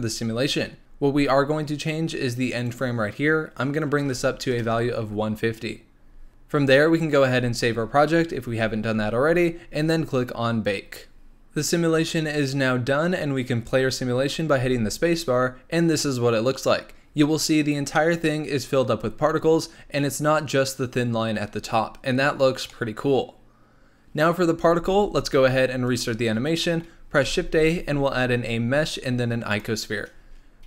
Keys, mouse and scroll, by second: 0.8 scroll down 1, 2.6-5.7 drag, 10.9 click, 14.5 space, 22.8-24.9 middle drag, 24.9 space, 25.8-26.6 drag, 26.6-27.2 middle drag, 27.2 shift+a.